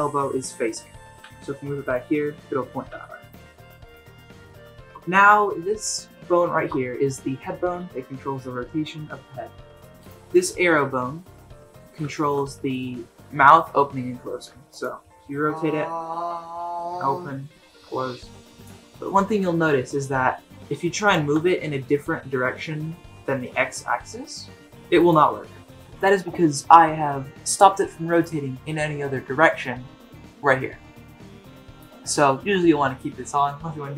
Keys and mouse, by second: 1.2 g, 2.0-2.7 middle drag, 2.9 g, 3.3-3.7 middle drag, 3.7 alt+r, 3.7 alt+g, 3.9 click, 4.3 middle click, 4.7 shift+middle drag, 5.0 middle drag, 6.4 shift+middle drag, 7.6 r, 10.0 click, 10.3-10.8 middle drag, 11.1-12.0 middle drag, 12.1 shift+middle click, 12.5 middle click, 13.4 r, 15.0 r, 20.5 r, 21.3 r, 25.4 r.